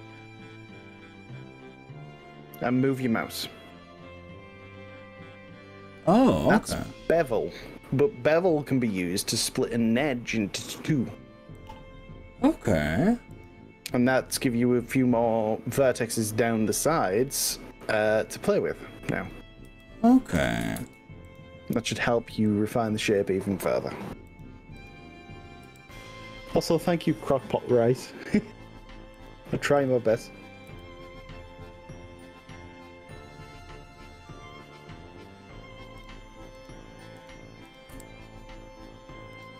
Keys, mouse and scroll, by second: 11.5 click, 13.4 click, 14.1-15.4 middle drag, 16.4 middle click, 17.8 click, 19.3 click, 19.8 g, 20.3 click, 20.8 ctrl+z, 21.3 click, 22.3 g, 24.8 click, 25.8 g, 26.8 click, 29.2 click, 29.8 click, 30.7 g, 31.0 scroll up 2, 31.4-32.0 scroll down 4, 32.4 scroll down 1, 33.2 scroll up 1, 34.0-34.6 scroll down 3, 35.0 scroll down 1, 36.0 click, 36.6 click, 37.2 click, 38.0 g, 38.4 scroll down 1, 39.4 click.